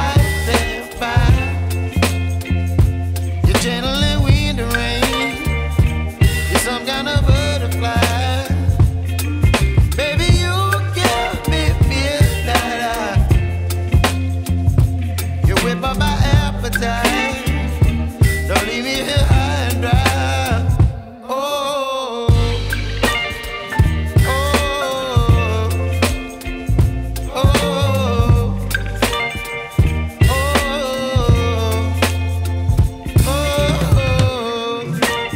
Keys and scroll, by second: 0.5 ], 9.5 3, 14.5 x, 16.0 x, 24.6 x, 29.9 x, 32.0 v.